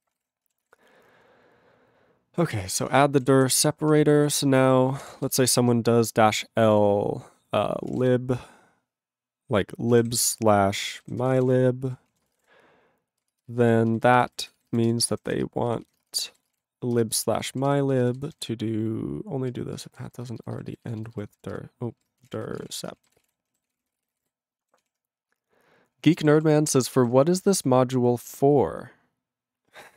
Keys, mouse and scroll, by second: 0.0 ctrl+e, 0.1 ctrl+n, 0.1 ctrl+e, 0.2 ctrl+g, 0.6 ctrl+s, 2.8 ctrl+p, 2.8 ctrl+space, 2.9 ctrl+e, 2.9 ctrl+g, 3.2 ctrl+n, 3.5 ctrl+s, 4.1 ctrl+p, 4.2 ctrl+p, 4.8 ctrl+p, 5.0 ctrl+a, 5.0 ctrl+o, 5.0 Tab, 5.3 -, 6.4 shift+l, 7.7-8.9 typing, 10.1-12.2 typing, 12.2 ctrl+space, 12.3 ctrl+e, 12.4 ctrl+g, 12.9 ctrl+g, 13.2 ctrl+space, 13.6 ctrl+alt+b, 14.1 ctrl+b, 14.3 ctrl+b, 14.4 ctrl+b, 14.7 ctrl+b, 14.9 ctrl+g, 15.3 /, 15.4 space, 15.7 ctrl+f, 15.8 ctrl+f, 16.0 space, 16.3 ctrl+a, 16.5 ctrl+e, 16.5 ctrl+g, 16.9 ctrl+space, 17.3 ctrl+alt+b, 17.7 ctrl+g, 17.9 ctrl+space, 18.0 ctrl+e, 18.2 ctrl+g, 18.3 ctrl+n, 18.4 ctrl+n, 19.4 ctrl+e, 19.8 ctrl+space, 20.2 ctrl+alt+b, 20.2 ctrl+alt+b, 20.4 ctrl+alt+b, 20.5 ctrl+alt+b, 20.7 ctrl+alt+b, 21.0 ctrl+alt+b, 21.1 ctrl+alt+b, 21.3 ctrl+alt+b, 21.6 ctrl+g, 22.0 ctrl+s, 22.0-23.2 typing, 23.3 ctrl+g, 23.8 ctrl+s, 23.8 ctrl+a, 23.9 ctrl+space, 24.0 ctrl+e, 24.0 ctrl+n, 24.1 ctrl+n, 24.2 ctrl+g, 24.8 ctrl+s, 26.4 ctrl+s.